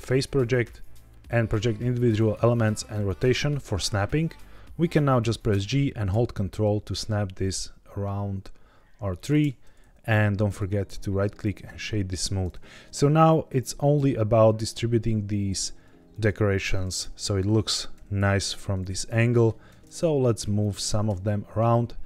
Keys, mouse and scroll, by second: 4.2-4.8 middle drag, 5.4 g, 9.1 ctrl+click, 10.4 right click, 15.3 s, 16.0 click, 16.9 KP_1, 17.8 g, 18.7 ctrl+click, 19.1 middle click, 19.6 alt+d, 20.5 ctrl+click, 20.8 alt+d.